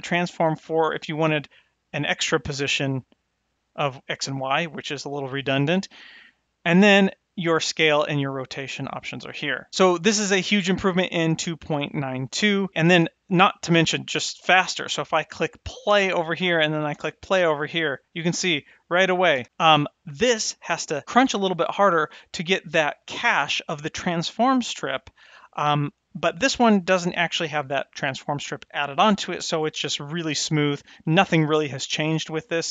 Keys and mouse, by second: 2.0 click, 3.3 click, 7.8-9.7 drag, 13.0 click, 15.8 space, 16.5 click, 16.9 space, 18.3 space, 19.1 click, 19.3 space, 22.3 click, 26.8-27.6 drag.